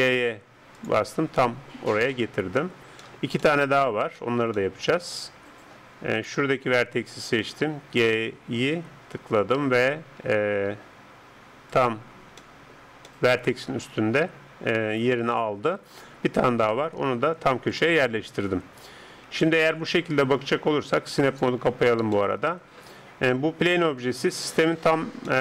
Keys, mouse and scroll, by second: 1.1-2.3 middle drag, 2.4-6.2 middle drag, 6.2 right click, 7.6 g, 12.0-15.0 middle drag, 15.0 right click, 15.4-17.3 middle drag, 15.8 right click, 17.0 g, 19.0 Tab, 19.4-22.6 middle drag, 21.3-23.2 drag, 23.2-25.4 middle drag.